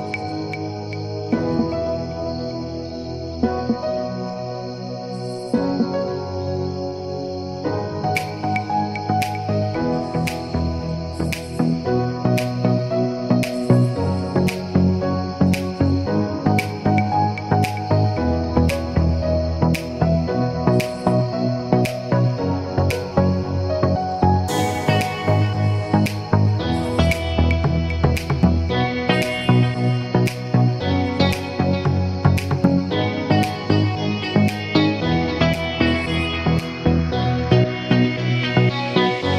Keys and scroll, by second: 0.3 1, 0.8 Return, 7.1 1, 7.5 Return.